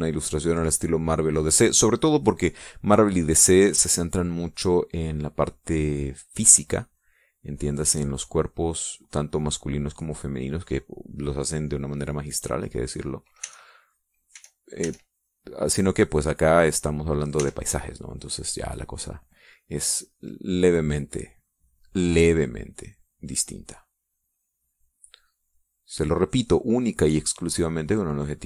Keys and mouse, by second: 0.2 shift+click, 7.7-13.9 drag, 14.2 e, 14.3 click, 15.1 e, 15.7-18.3 drag, 18.1 e, 20.9-25.9 drag, 26.3-27.5 middle drag, 28.3-28.4 drag.